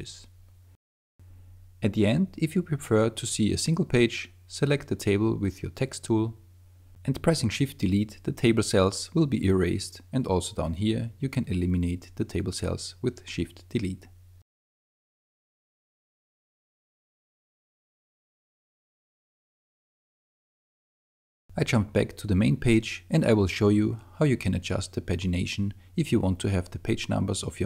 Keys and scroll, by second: 1.8 super+space, 8.8 shift+BackSpace, 15.3 shift+BackSpace, 19.9 super+0.